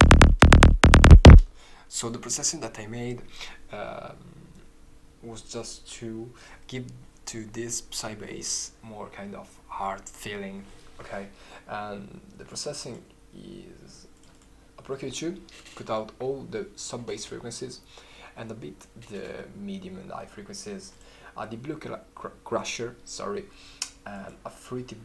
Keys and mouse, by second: 12.4 right click.